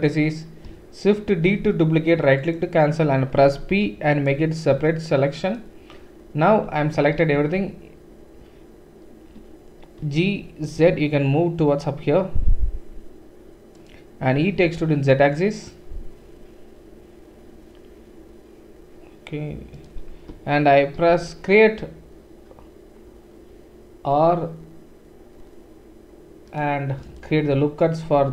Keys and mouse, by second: 1.4 shift+d, 1.6-4.7 middle drag, 3.7 p, 4.7 Tab, 6.6 Tab, 7.3 a, 10.0 g, 14.4 e, 20.9 ctrl+r, 28.0 ctrl+r.